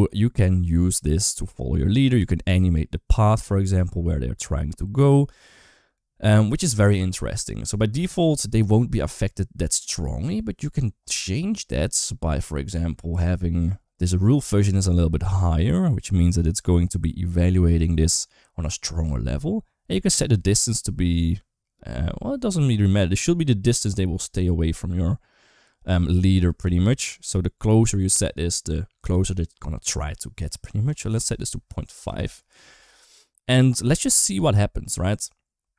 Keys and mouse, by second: 1.4 g, 7.8 space, 7.9 click, 9.6 click, 14.8-17.6 drag, 20.0-22.2 drag, 26.1 right click, 30.8-32.1 drag, 34.2 space.